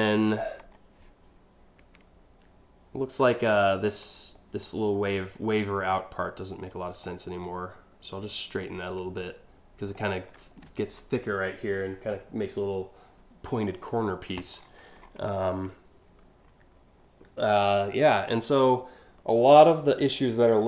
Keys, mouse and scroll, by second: 3.5 ctrl+click, 4.3-6.3 ctrl+drag, 7.1-8.2 ctrl+drag, 8.5 ctrl+click, 14.2-15.2 scroll down 4, 17.3 scroll down 1, 17.6 scroll up 1, 17.9-18.3 scroll down 2.